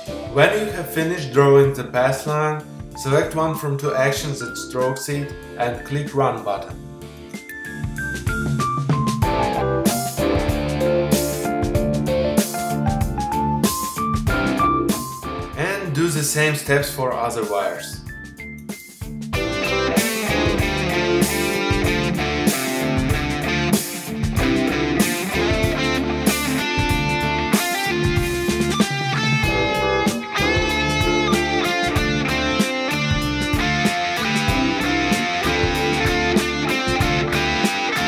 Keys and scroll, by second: 18.8 space, 20.6 space, 22.1 p, 25.0 space, 28.8 space, 29.6 p, 32.8 space, 34.4 space, 35.2 p.